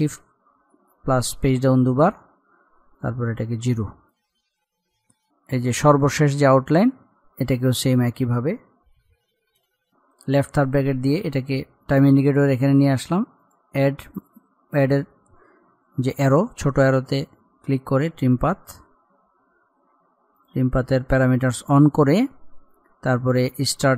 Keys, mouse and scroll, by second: 3.0-4.4 drag, 4.4-4.8 scroll up 1, 5.1 click, 9.3-9.7 scroll up 1, 13.4 click, 18.4 click, 19.0-19.4 scroll up 1, 20.4 click, 23.6-23.9 drag.